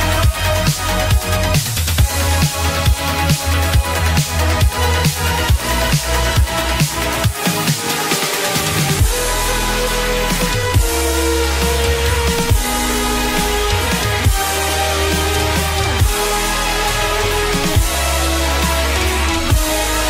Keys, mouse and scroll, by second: 2.8 middle click, 13.8-14.1 scroll down 10, 17.9 middle click.